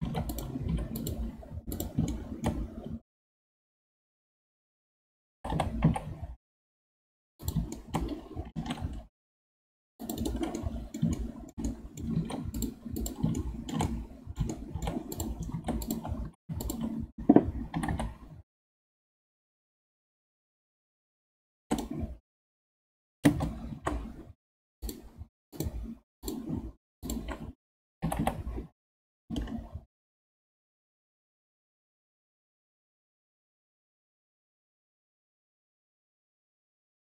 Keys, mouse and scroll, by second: 0.0 ctrl+Tab, 0.7 2, 1.0 click, 1.7 click, 2.1-5.2 shift+middle drag, 5.4 g, 7.7 shift+middle click, 8.5 ctrl+r, 10.6-12.1 middle drag, 12.1 ctrl+Tab, 13.4-15.1 shift+middle drag, 15.1 click, 15.5 ctrl+Tab, 16.2 2, 16.6 alt+click, 17.7 g, 22.5 space, 24.8 click, 25.5-27.1 drag, 28.0 g.